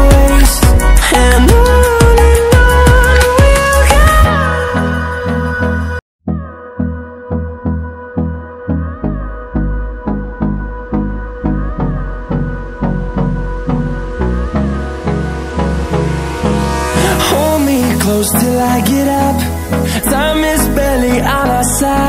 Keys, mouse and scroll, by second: 9.9 ctrl+scroll down 1, 11.5 click, 16.2 ctrl+alt+scroll down 1, 16.6 ctrl+alt+scroll up 1, 17.1 click, 17.8 alt+shift+scroll up 1, 18.8-20.1 alt+shift+drag, 20.1 ctrl+alt+scroll down 1, 20.8 click, 21.3 ctrl+alt+scroll down 1, 21.8 ctrl+click.